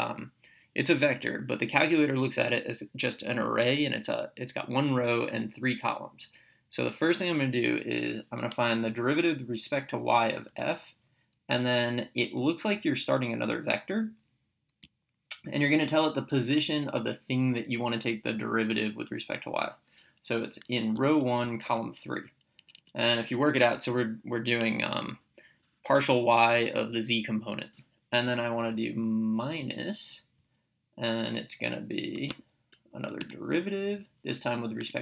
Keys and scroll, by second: 10.5 f, 14.9 (, 20.8-22.2 typing, 22.6 Right, 29.5 -, 34.8 z.